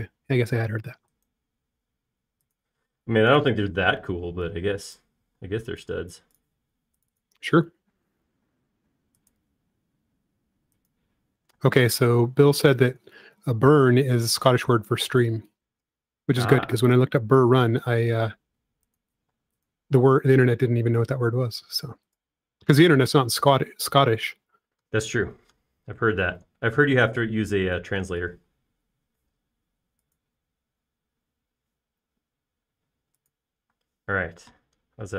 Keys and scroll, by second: 2.1 space, 5.5 e, 6.8 space, 9.3 m, 13.8 shift+space, 14.7 shift+m, 20.9 space, 22.9 m, 25.6 space, 30.0 m, 31.9 Up.